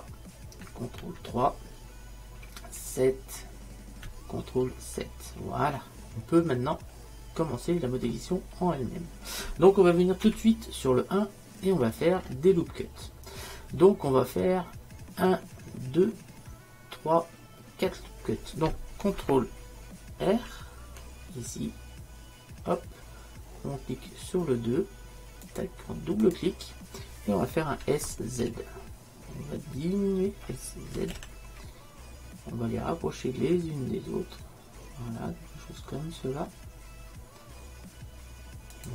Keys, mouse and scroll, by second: 7.6-10.3 middle drag, 20.3 ctrl+r, 23.8 ctrl+r, 27.9 s, 28.5 z, 31.0 s.